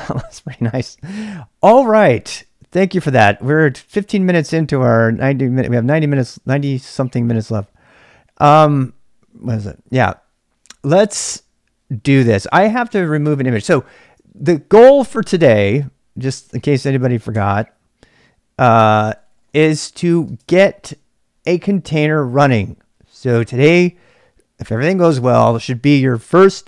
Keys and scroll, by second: 12.9-14.2 typing, 16.1-17.2 typing, 17.3 Return, 18.5-22.2 typing, 23.8-24.6 typing.